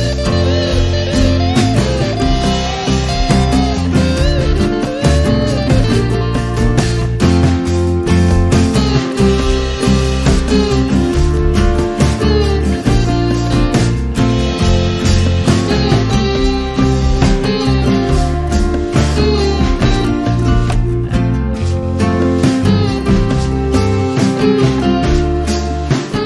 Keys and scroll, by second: 8.8 space, 15.6 r, 22.4 e, 25.4 space.